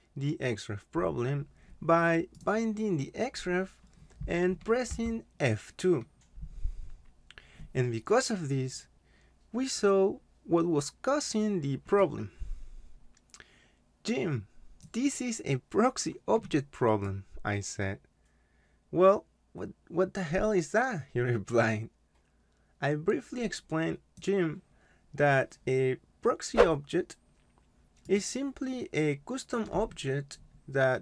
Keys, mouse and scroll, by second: 1.3 click, 5.0 F2, 12.0 click, 17.0 click, 24.1 click, 28.1 click.